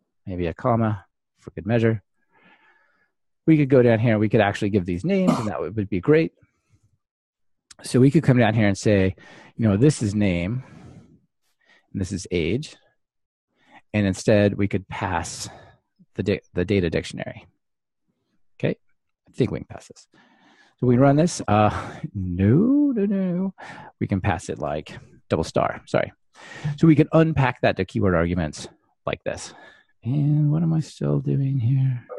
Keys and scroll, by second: 2.4 alt+super+l, 4.3 super+c, 5.7 super+z, 6.8 super+v, 20.1 ctrl+r, 28.3 ctrl+r.